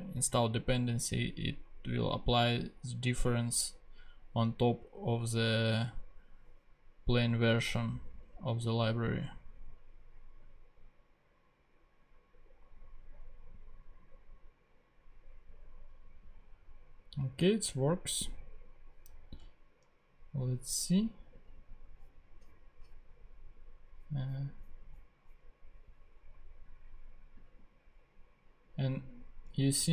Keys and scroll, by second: 17.3 super+Tab.